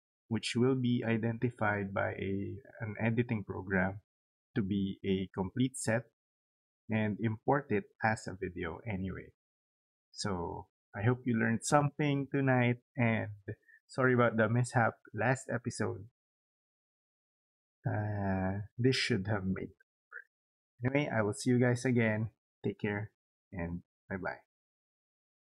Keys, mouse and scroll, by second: 9.5 click, 25.4 click.